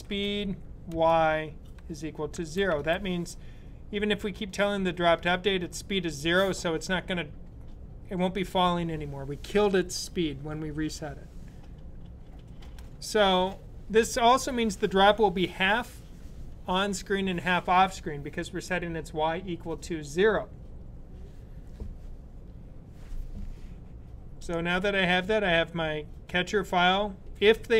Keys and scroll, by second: 0.0-0.2 typing, 1.5-3.1 typing.